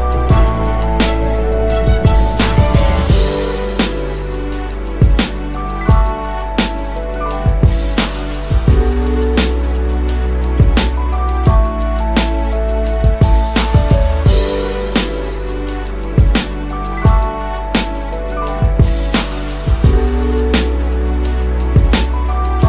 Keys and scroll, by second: 22.0 ctrl+alt+o.